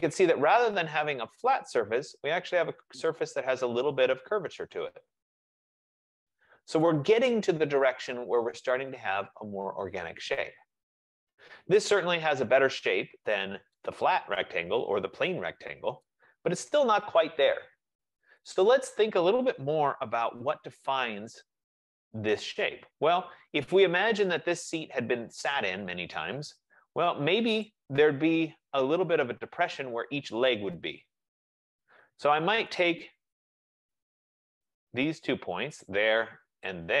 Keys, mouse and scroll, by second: 0.0 middle click, 0.1 middle click, 6.9 right click, 10.4-12.3 right drag, 13.9-16.3 right drag, 17.1 right click, 17.7 F15, 18.8 click, 20.0-20.8 typing, 21.5 Return, 26.3 right click, 27.7 click, 29.7 right click, 32.9 click, 33.8 click, 34.7 click, 35.9 shift+click.